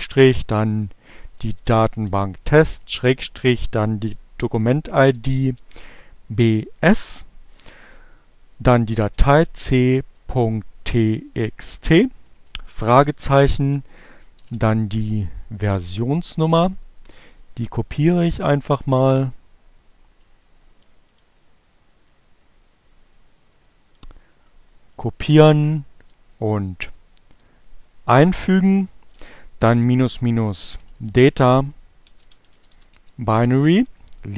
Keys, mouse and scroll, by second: 1.0-2.0 typing, 3.7-5.3 typing, 6.6 c, 8.8-9.8 typing, 11.5-12.4 typing, 14.2 shift+0, 16.3 click, 17.1 click, 19.6-20.7 drag, 21.7-23.5 drag, 24.3 right click, 24.6 click, 25.5 click, 26.3 right click, 26.9 click, 27.5 space, 29.1-32.9 typing.